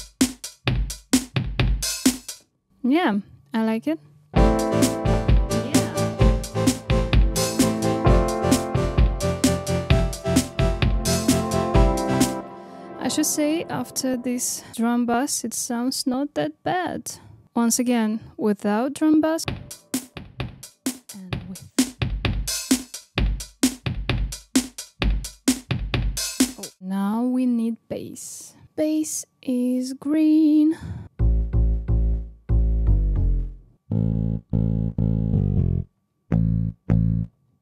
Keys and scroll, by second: 19.4 space.